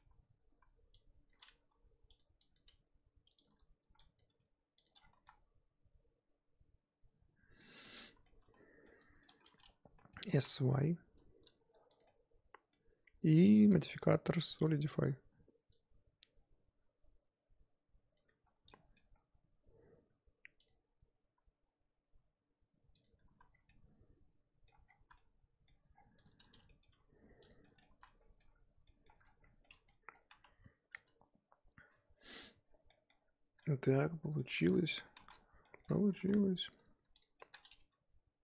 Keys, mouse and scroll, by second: 0.0 z, 0.5 z, 1.3 click, 1.6 g, 2.5 click, 2.6 g, 4.1 click, 4.3 g, 5.0 scroll down 5, 5.1 z, 5.2-7.7 middle drag, 7.7-8.2 scroll up 2, 8.2 middle click, 9.0 a, 9.2-10.3 middle drag, 10.3 s, 12.0-12.9 middle drag, 12.9 Tab, 14.6-18.7 drag, 18.7 middle click, 19.1-19.7 scroll up 3, 20.6-23.3 drag, 23.3 z, 23.5 scroll down 4, 23.6-24.8 middle drag, 24.8 scroll up 1, 24.8 scroll down 5, 24.9 z, 25.1-25.9 middle drag, 25.9 scroll down 1, 26.1 click, 26.6 middle drag, 26.9 g, 27.6 middle drag, 27.9 z, 28.0-28.5 middle drag, 28.5 scroll up 4, 28.8-29.2 middle drag, 29.2 scroll down 1, 29.4 scroll up 4, 29.6-30.1 middle drag, 30.1 scroll down 3, 30.3 KP_1, 32.2 scroll up 3, 32.9-34.7 shift+middle drag, 34.7 click, 34.8 scroll up 3, 34.9 Tab, 35.3 z, 35.6 shift+middle click, 35.9-36.4 scroll up 3, 36.7 click, 37.2 shift+click, 37.4 shift+middle click, 37.7 g.